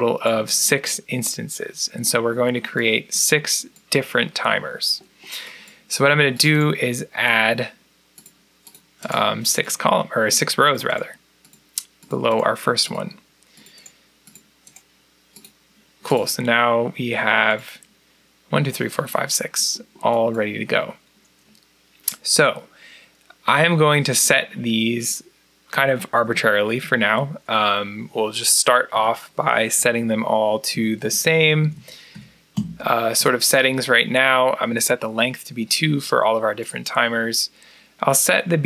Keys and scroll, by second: 28.8 2, 29.6 Down, 30.6-33.0 typing, 30.9 Down, 31.3 Down, 31.6 Down, 32.4 Down.